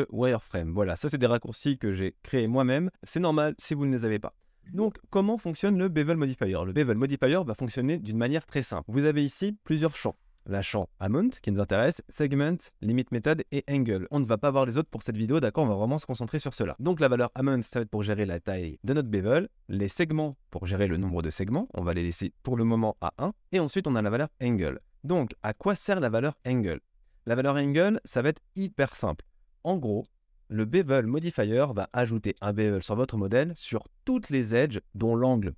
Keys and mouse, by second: 0.9 shift+click, 1.4-17.6 middle drag, 3.3 KP_1, 17.6-19.0 drag, 19.0-20.2 middle drag, 20.2-22.6 drag, 22.6 middle click, 22.9-35.5 drag, 25.8 KP_3, 27.0 KP_1.